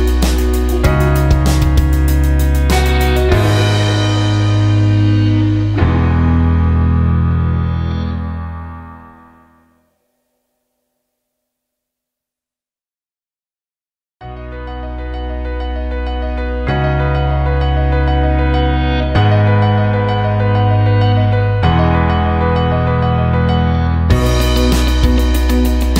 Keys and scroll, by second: 1.3 ctrl+shift+g, 20.1 Delete, 23.9 typing.